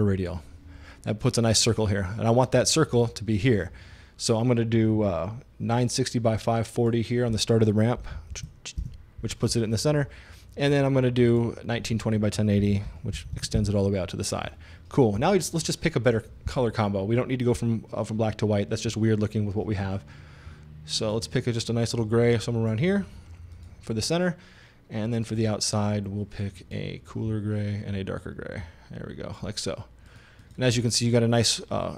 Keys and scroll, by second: 7.8-8.9 typing, 12.4-13.9 typing.